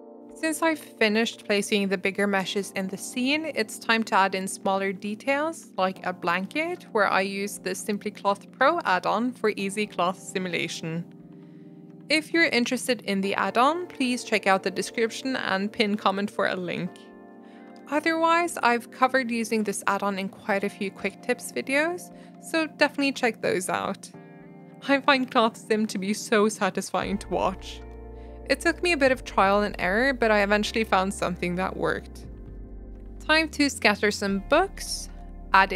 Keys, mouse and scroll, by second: 0.0 right click, 0.4-3.0 typing, 1.6 middle drag, 1.7 scroll up 1, 1.8 middle click, 3.6 middle click, 4.4 shift+d, 4.8 s, 5.3 s, 5.7 r, 6.2 click, 6.2-6.6 middle drag, 6.6 click, 6.8 click, 7.4 click, 8.7 click, 8.8 scroll down 2, 8.9-9.5 middle drag, 9.3 scroll up 1, 9.5 click, 9.8 g, 10.5 r, 11.3 g, 11.5 r, 11.9-12.8 drag, 14.5 click, 14.6 middle click, 15.2 click, 15.5 g, 16.6 click, 19.8 click, 19.9-20.6 middle drag, 20.6-21.2 drag, 21.2 middle click, 21.4 r, 22.3 middle click, 22.5 g, 22.9 click, 23.0-23.6 middle drag, 23.6 g, 23.9-25.0 drag, 27.0 click, 27.1 middle click, 27.2 r, 27.7 g, 28.0 middle click, 28.3 r, 28.5 click, 32.5 click, 32.6 middle click, 33.1 click, 33.2 shift+middle click, 33.6 scroll up 1, 33.8 shift+middle click, 34.0 r, 35.1 g.